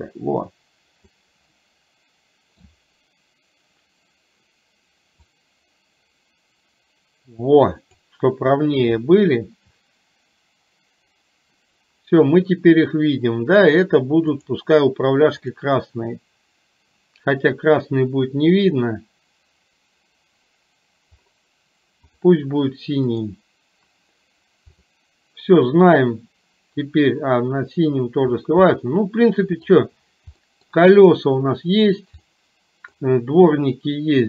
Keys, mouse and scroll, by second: 1.6-5.2 middle drag, 5.2-8.0 drag, 15.4 click, 23.2 click, 24.9 click, 28.8 middle click, 30.4 middle click, 32.3 middle click.